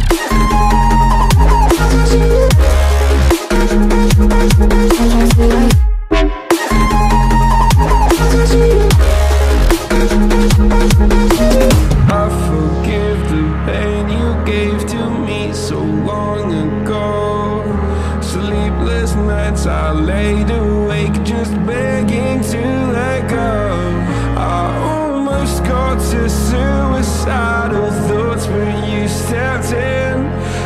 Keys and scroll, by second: 19.5 Left, 20.1 Right, 22.3 Right, 25.5 Right, 27.5 Left, 30.1 Right.